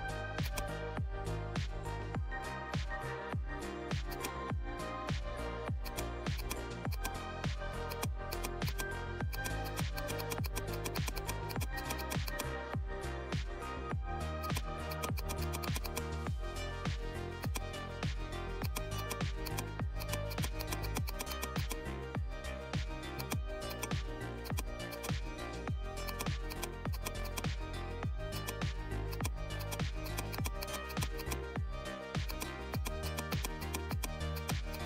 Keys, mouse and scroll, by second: 3.2 ctrl+z, 4.0 click, 4.1 click, 5.8-9.2 drag, 12.5 right click, 14.4 click, 14.4 click, 17.3-20.0 drag, 21.8 scroll down 1, 23.1-29.5 drag, 30.0 click.